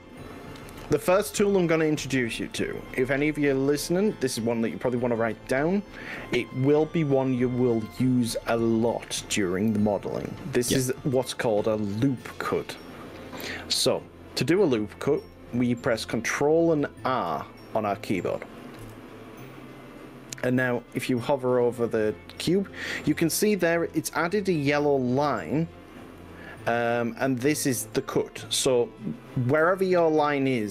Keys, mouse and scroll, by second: 0.7-2.1 middle drag, 2.5 KP_5, 2.9 middle click, 3.9 middle click, 4.3-6.9 middle drag, 15.3 click, 18.9 ctrl+r.